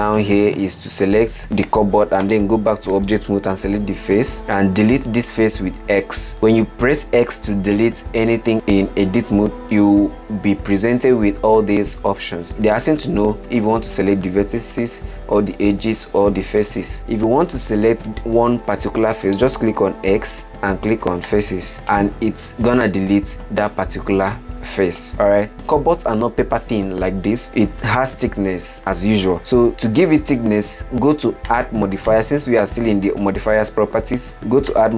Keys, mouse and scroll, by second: 1.4 click, 1.4 middle click, 2.5 Tab, 3.4 click, 5.1 x, 9.4 x, 20.4 x, 22.2-25.1 middle drag, 25.3 middle click, 32.4 click.